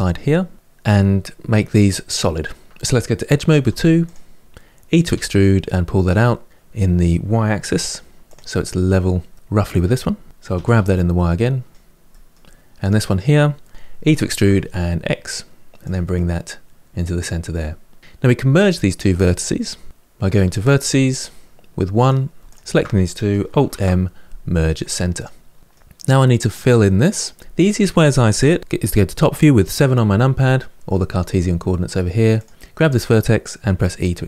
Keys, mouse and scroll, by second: 2.7 ctrl+z, 3.4 2, 3.8 click, 4.9 e, 9.1-10.3 middle drag, 10.3 g, 11.7 click, 11.9 middle click, 12.6 click, 13.7 r, 13.8 e, 15.9-18.0 middle drag, 20.1 1, 21.7 click, 22.2 shift+click, 23.5 alt+m, 25.5-26.8 middle drag, 28.5 KP_7, 32.1 click, 33.5 e.